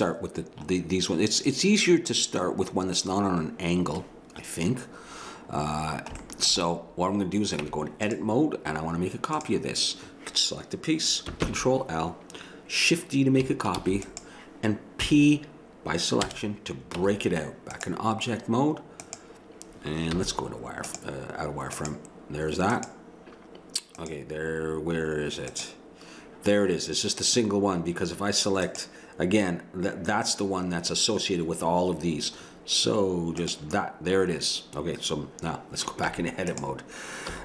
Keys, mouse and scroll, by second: 5.2 middle click, 5.8 middle click, 7.6 Tab, 11.4 ctrl+l, 13.8 shift+d, 15.0 p, 17.0 Tab, 20.1 z, 22.6-23.9 drag, 33.4-36.0 drag, 36.0 Tab, 37.3 a.